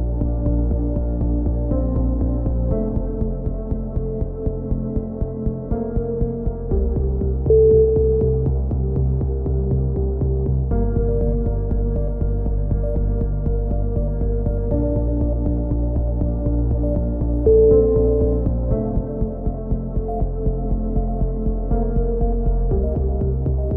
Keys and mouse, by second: 1.3 a, 6.3 a, 6.6 a, 7.1 k, 10.4 click, 10.8 middle click, 11.6-12.7 drag, 12.5 x, 13.7 a, 14.2-16.7 middle drag.